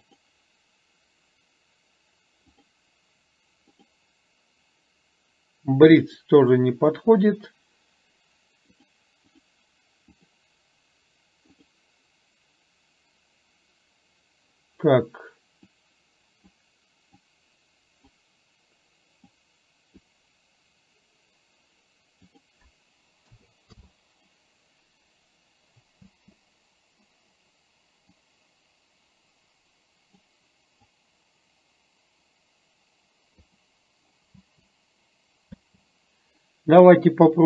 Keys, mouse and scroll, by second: 2.7-4.0 drag, 6.0-7.9 drag, 8.9 click, 10.3-11.8 drag, 15.8 click, 17.3 click, 19.4 click, 22.4-23.9 drag, 26.2 space, 28.2-30.4 drag, 30.9-33.7 drag, 34.4 space, 35.8 space.